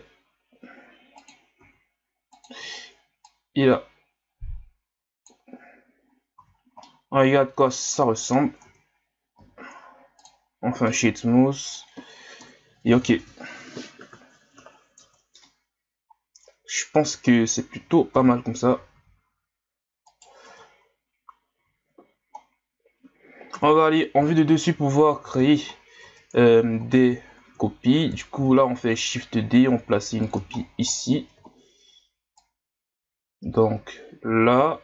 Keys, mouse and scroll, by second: 1.6 r, 3.2-6.5 drag, 6.5 scroll down 1, 6.9-8.6 middle drag, 8.6 Tab, 9.3 w, 10.9-12.4 middle drag, 12.4 KP_1, 13.5 z, 14.2 scroll up 1, 15.0 Tab, 17.8 a, 18.1 a, 18.9 s, 20.4 Tab, 21.6 z, 22.5-23.5 scroll down 1, 23.5 KP_7, 24.4 shift+scroll down 1, 25.0 scroll down 9, 25.7 scroll down 1, 26.0 Tab, 26.8 ctrl+scroll down 2, 27.2 scroll up 3, 28.4 shift+d, 30.6-31.0 scroll down 10, 31.5-32.4 ctrl+scroll up 1, 32.4-34.8 drag.